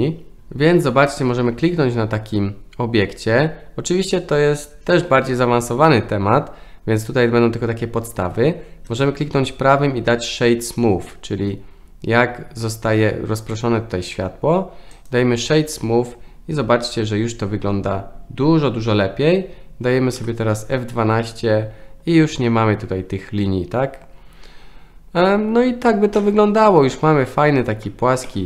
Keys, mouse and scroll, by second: 1.1 click, 8.9-13.1 right drag, 13.6-15.1 right drag, 20.3 F12.